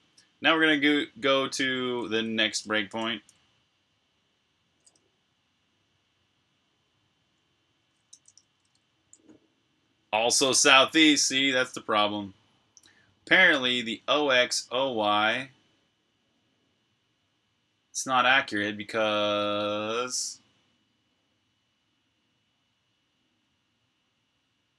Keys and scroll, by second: 2.1-2.8 typing, 8.0-8.6 typing.